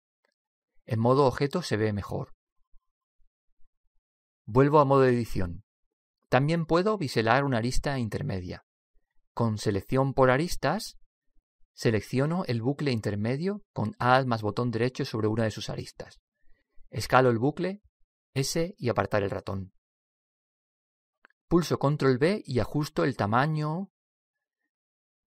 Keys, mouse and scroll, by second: 2.1 Tab, 5.6 Tab, 10.0 middle click, 10.8 click, 15.2-17.0 right drag, 17.8 s, 22.4 ctrl+b, 24.5 click.